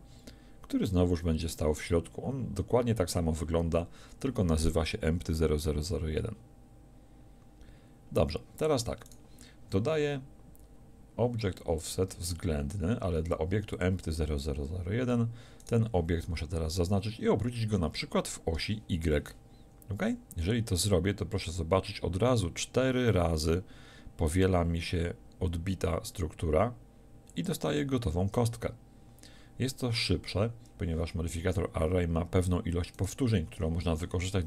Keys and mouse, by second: 9.1-14.6 drag, 15.6-18.5 right drag, 18.5 r, 27.5-30.5 drag, 32.9 right click.